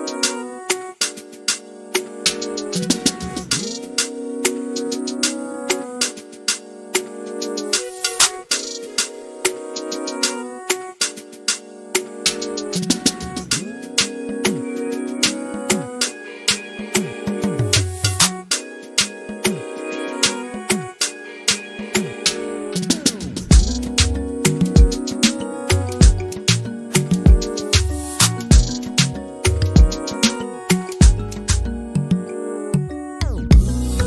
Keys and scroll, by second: 0.0 m, 8.7 m, 10.1-12.4 typing, 22.8 m, 24.7 Right, 25.0 typing, 26.1 typing, 27.9-28.9 typing, 30.1-30.8 typing, 33.0-34.0 typing.